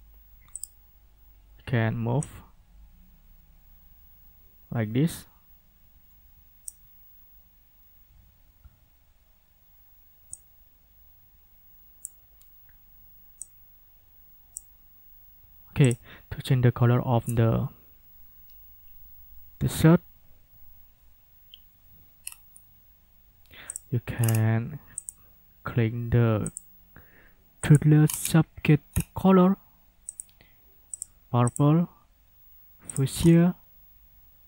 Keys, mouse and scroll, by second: 0.6 click, 2.2-6.8 drag, 10.3-12.2 drag, 13.4-14.7 drag, 15.8 click, 22.2 scroll down 2, 23.7 click, 24.2 scroll down 2, 25.0 click, 26.5 click, 27.6 click, 28.0-28.4 scroll down 2, 28.9 scroll down 2, 30.1 click, 30.9 click, 31.5 click, 32.9 click, 33.2 scroll down 2.